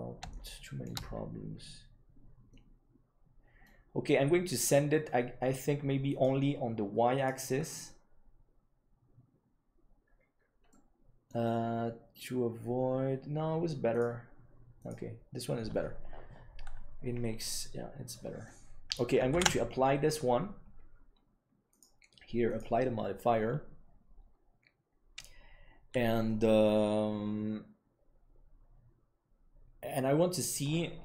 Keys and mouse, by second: 0.2 shift+middle click, 2.4-3.6 middle drag, 6.1-9.3 drag, 10.6 middle click, 14.0-16.8 drag, 18.4-18.9 middle drag, 20.0 ctrl+s, 22.3-24.9 drag.